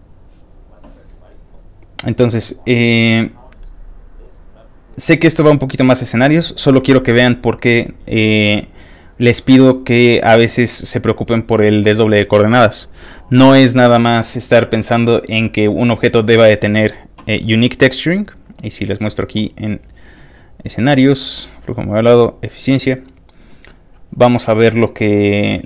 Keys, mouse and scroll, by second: 1.5 click, 2.6 click, 3.6 click, 4.5 click, 6.1 click, 7.4 click, 9.4 click, 10.7 click, 15.8 click, 16.4 click, 17.8 click, 18.3 click, 20.5 click, 21.6 click, 22.3 click, 23.7-25.0 scroll down 2, 25.4 scroll down 1.